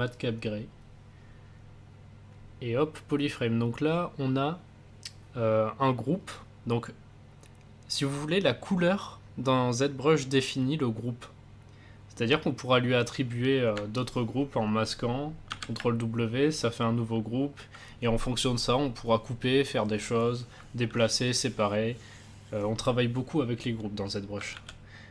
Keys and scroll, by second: 15.5 ctrl+v, 24.5 ctrl+z.